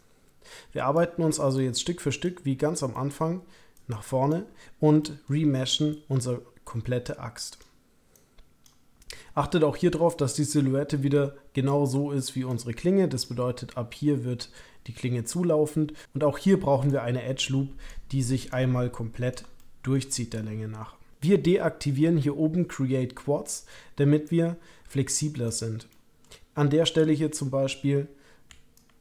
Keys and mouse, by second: 1.5 click, 2.9 middle click, 5.0 shift+middle click, 7.3 click, 8.1 click, 10.2-13.2 drag, 16.8-17.8 drag, 18.5 click, 19.6 shift+click, 24.2-25.4 drag, 25.9 middle click, 28.7-29.0 ctrl+drag.